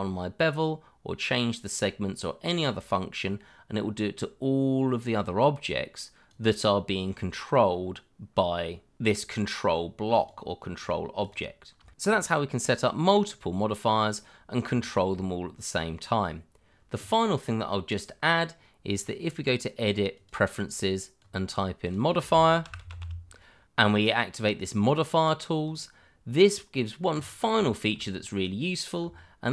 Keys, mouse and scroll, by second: 7.7-8.9 scroll down 1, 9.2 scroll up 1, 10.2 click, 11.3 click, 11.3 double click, 11.9 shift+middle click, 13.5 middle click, 14.5 shift+middle click, 14.5 middle click, 15.9 shift+middle click, 16.0 middle click, 16.1 shift+middle click, 16.5-17.3 scroll up 1, 19.0 click, 19.4 double click, 20.1 click, 22.6 m, 22.8 o, 22.9 d, 23.0 i, 25.6 click, 27.6 shift+middle click, 27.7 middle click, 27.8 shift+middle click, 28.0 scroll up 1, 29.1 shift+middle click, 29.2 middle click, 29.3 shift+middle click.